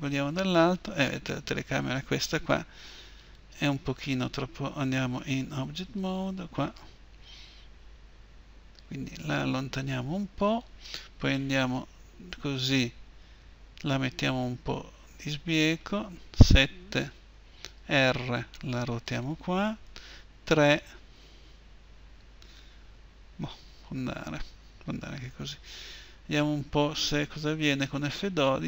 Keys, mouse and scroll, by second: 0.4-4.9 middle drag, 4.9 Tab, 5.7-7.3 right drag, 7.3-9.6 middle drag, 8.6 g, 11.5 KP_1, 13.7 g, 16.2 KP_7, 17.5 r, 19.9 KP_3.